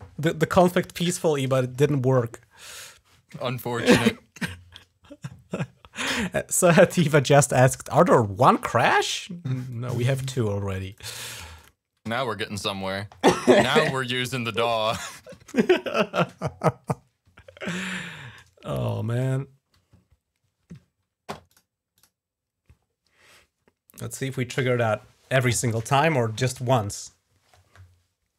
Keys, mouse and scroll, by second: 9.5 click, 10.7 click, 11.4 click, 21.3 click.